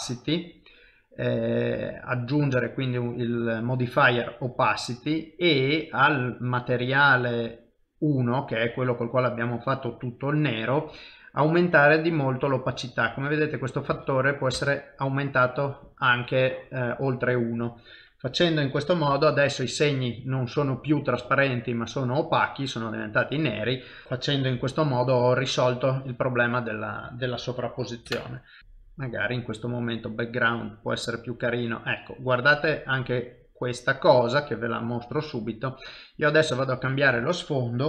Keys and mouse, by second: 11.5 click, 24.0 shift+middle click, 24.7 F12, 28.1 ctrl+alt+KP_0, 28.6 click, 29.1 click.